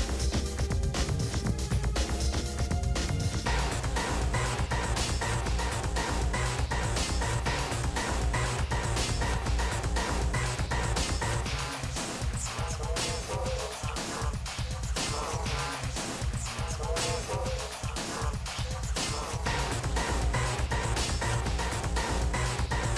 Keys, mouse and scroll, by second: 0.3 shift+d, 0.7-1.1 scroll up 10, 0.8 shift+middle click, 1.1 shift+middle click, 1.5 g, 2.7 middle click, 2.8-3.4 scroll down 19, 3.1 middle click, 3.4 middle click, 3.7 click, 3.9 middle click, 5.3 ctrl+s.